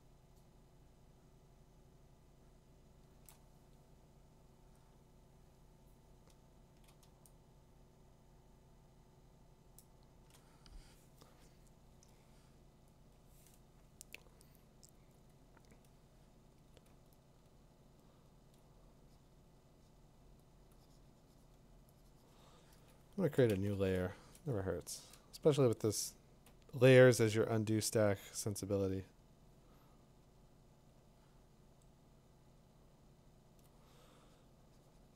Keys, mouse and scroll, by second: 2.5-3.3 click, 2.5 click, 3.3-6.3 drag, 3.5 Tab, 4.8 Tab, 9.8 click, 16.7 click, 17.3 click, 17.9 click, 18.2 click, 18.5 click, 20.5 click, 23.5 shift+n, 26.4 click, 27.5-30.4 drag, 33.3 click, 33.6 click.